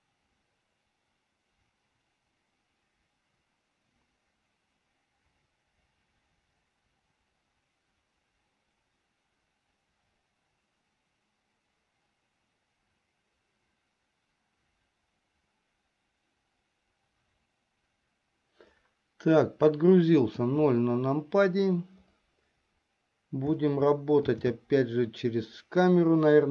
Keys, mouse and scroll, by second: 21.2 KP_0, 25.1 shift+f.